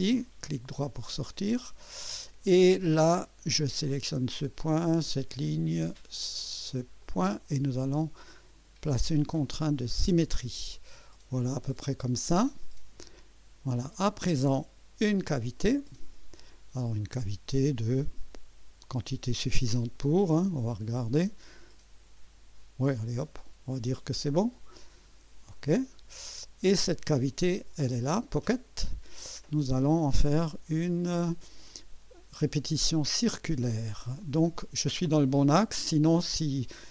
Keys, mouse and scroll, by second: 1.3 right click, 2.3 right click, 3.8 click, 5.2 click, 7.0 click, 9.4 click, 13.0 click, 15.4 click, 16.5 right click, 18.1 scroll up 1, 20.1 click, 20.9-23.4 drag, 25.4 click, 26.3-27.1 drag, 28.5 click, 32.8 click, 34.2-35.3 drag.